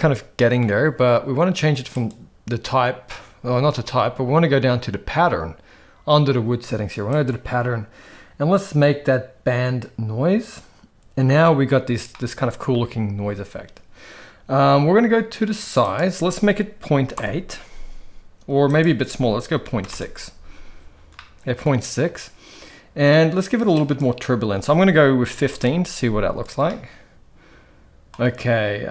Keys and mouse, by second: 1.9 click, 7.2-10.8 drag, 12.1-12.7 middle drag, 15.8-17.4 drag, 18.7-20.1 drag, 21.1-21.6 middle drag, 23.7-25.7 drag, 26.6-28.1 middle drag.